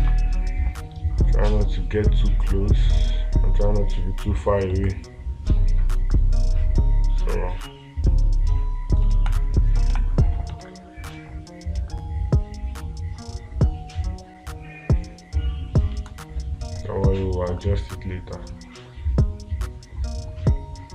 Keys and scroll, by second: 0.5 ctrl+space, 5.2 space, 9.6 ctrl+space, 11.1 ctrl+space, 16.4 space.